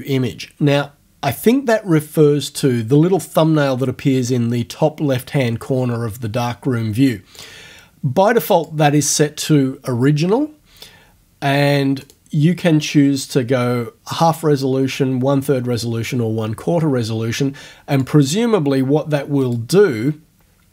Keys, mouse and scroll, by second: 7.4 click, 8.5 click, 12.1 click, 18.0 click, 19.4 click.